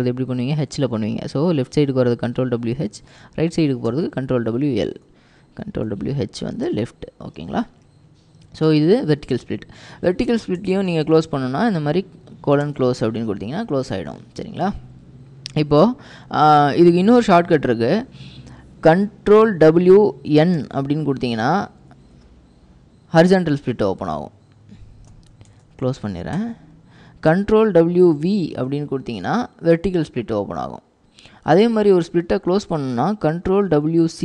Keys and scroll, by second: 3.0 ctrl+w, 3.9 l, 5.7 ctrl+w, 6.7 typing, 9.2-11.6 typing, 12.7 Return, 19.9 ctrl+w, 20.7 ctrl+n, 22.0-23.0 typing, 25.0-26.6 typing, 27.7 ctrl+w, 33.8 ctrl+w.